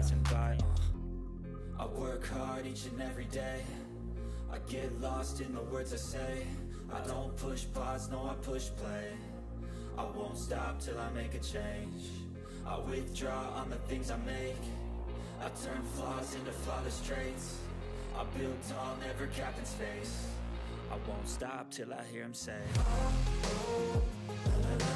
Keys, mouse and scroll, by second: 2.9 ctrl+x, 3.3 click, 3.7 ctrl+v, 4.3 click, 4.8-7.1 typing, 8.3 Return, 8.7-10.3 typing, 11.1 click, 12.4-13.8 typing, 14.9-15.8 typing, 16.0 click, 17.3 Return, 17.3-19.9 typing, 20.5 click, 21.9 h, 23.4 click, 24.2 h.